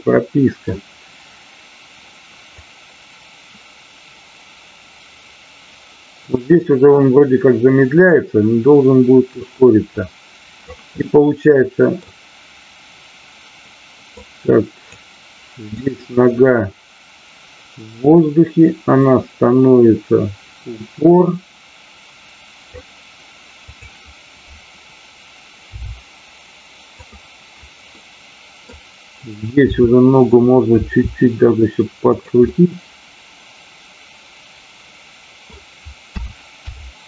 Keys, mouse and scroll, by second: 2.6-10.7 drag, 11.0-12.1 middle drag, 14.1-15.0 drag, 15.9-22.7 drag, 23.6-24.2 drag, 27.1 click, 28.0 middle click, 29.6 r, 32.1 click, 32.3-35.5 middle drag.